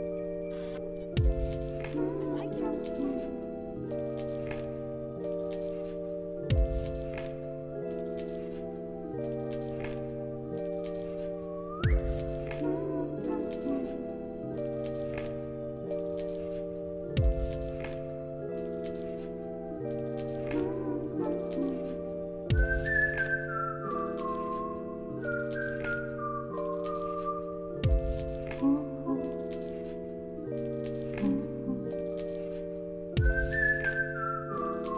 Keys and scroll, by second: 2.4 b, 4.7 v, 15.5 space, 16.6 t, 21.7 t, 23.8 1, 24.2 0, 24.5 Return, 25.7 t, 27.3 0, 27.6 Return, 28.5 ctrl+a, 28.8 t.